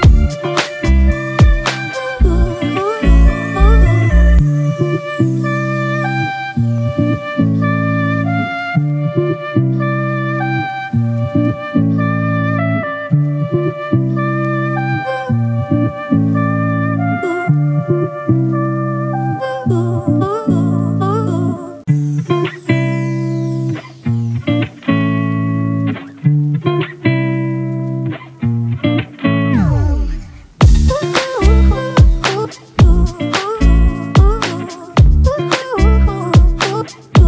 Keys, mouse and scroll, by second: 5.7 ctrl+t, 14.5 Return, 16.5 double click, 24.2 double click, 26.8-27.6 typing, 30.7 typing, 30.9 double click.